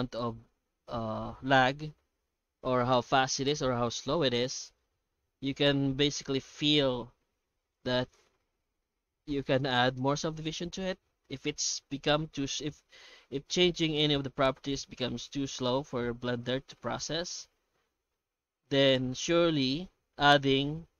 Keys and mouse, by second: 13.4 F9.